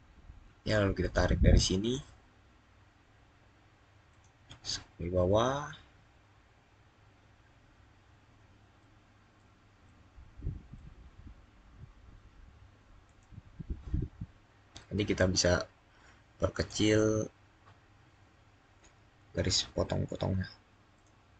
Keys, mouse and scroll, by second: 0.8 click, 1.3 scroll up 1, 3.9-4.8 scroll up 1, 4.8 scroll down 1, 5.3-5.8 scroll up 1, 8.6 scroll, 12.9 click, 16.4 click, 17.3 click, 17.5-17.9 scroll up 1, 18.0 scroll down 1, 18.8-19.6 scroll down 1, 19.8 scroll up 2, 20.8 click.